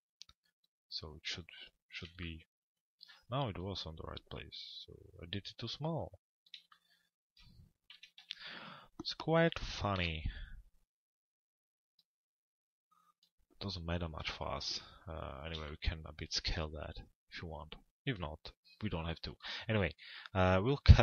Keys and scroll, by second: 7.6 f, 8.2 z, 9.5 l, 10.0 z, 13.8 p.